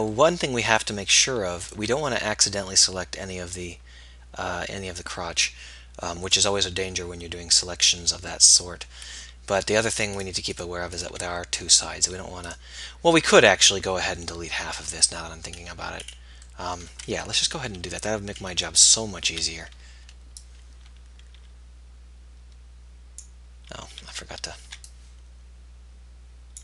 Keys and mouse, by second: 10.1-11.6 drag, 11.8-14.2 drag, 15.8-17.3 middle drag, 17.3 KP_1, 19.4 a, 20.2 b, 24.1 z, 25.0 b.